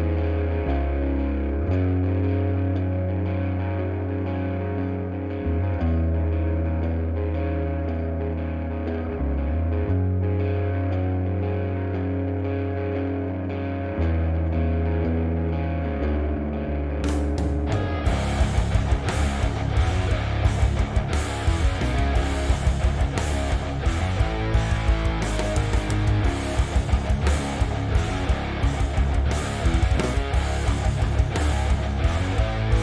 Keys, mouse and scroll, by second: 0.1 click, 0.2 g, 1.0 click, 1.1 g, 1.7 click, 1.8 g, 2.2 right click, 2.5 click, 2.8 shift+click, 5.5 click, 5.8 f, 7.8 click, 7.9-10.7 typing, 8.4 click, 9.1-9.5 drag, 9.5 right click, 10.3 click, 10.5 click, 11.5 click, 11.7 click, 11.9 g, 12.4 click, 13.0 g, 14.1 drag, 14.4 g, 14.8 click, 15.4 g, 16.1 click, 16.4 g, 17.0 click, 17.4 g, 17.8 click, 17.9 click, 18.2 g, 18.6 click, 18.9 g, 19.4 click, 19.5 scroll down 1, 19.8-21.3 shift+middle drag, 21.3 click, 21.7 f, 22.0 click, 22.2 f, 22.4-22.8 scroll down 1, 23.0 f, 24.3-24.7 scroll up 1, 24.7 click, 25.7 f, 25.9 click, 26.3 f, 26.7-29.2 shift+middle drag, 26.9 f, 27.6-27.9 scroll up 2, 29.2 shift+click, 29.5 shift+click, 29.7 f, 30.1 click, 30.4 shift+drag, 30.6 shift+drag, 30.9 shift+click, 31.3 shift+click, 31.5 f, 31.9 click, 32.5 shift+click, 32.7 f.